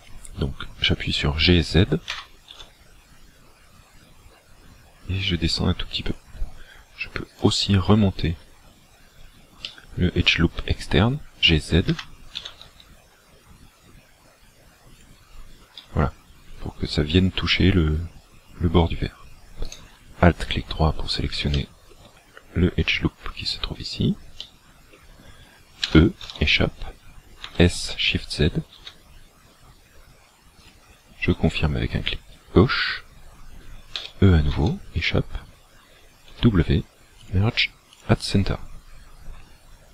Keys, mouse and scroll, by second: 2.2 g, 6.2 click, 7.3 alt+right click, 9.8 shift+middle click, 11.9 g, 15.0 shift+click, 19.7 alt+right click, 20.8-21.4 scroll down 4, 21.5 shift+middle click, 22.3 scroll down 2, 24.5 middle click, 25.8 e, 27.4 s, 30.6 shift+click, 34.0 e, 36.3 w.